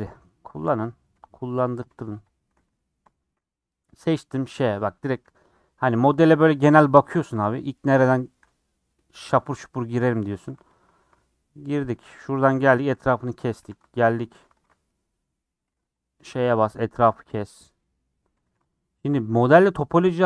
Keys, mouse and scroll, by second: 1.0 3, 1.2 click, 1.4 middle click, 2.2 shift+click, 3.0 ;, 3.4-10.4 middle drag, 10.4 3, 11.2-12.5 middle drag, 12.5 ;, 12.9 middle click, 13.3 scroll up 1, 13.6 3, 14.5 alt+click, 14.8-16.3 middle drag, 16.3 ;, 16.7 middle click, 17.1 scroll up 3, 17.4 middle click, 17.7 scroll down 1, 17.9 middle click, 18.4 2, 18.7 alt+Left, 18.9-20.2 middle drag, 20.2 alt+z.